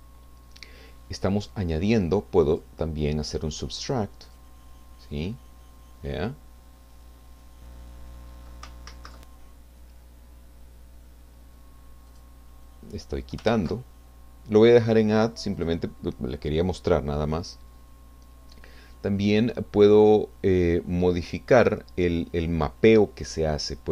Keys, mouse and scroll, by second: 2.5 click, 4.3 click, 5.1-5.5 scroll down 2, 6.7-7.4 scroll up 4, 7.4-10.2 middle drag, 8.9 ctrl+z, 10.2-10.6 scroll down 4, 12.1 click, 13.5 ctrl+z, 15.6 click, 21.1 click.